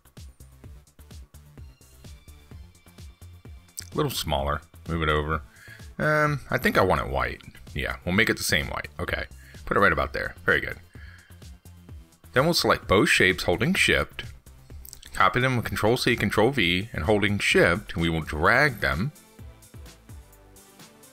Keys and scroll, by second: 16.6 ctrl+c, 16.8 ctrl+v, 18.3 ctrl+z.